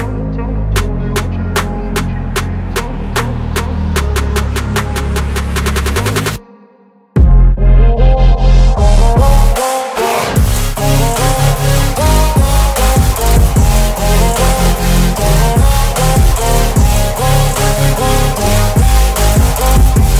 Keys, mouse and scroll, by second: 0.9-2.4 drag, 19.0 click.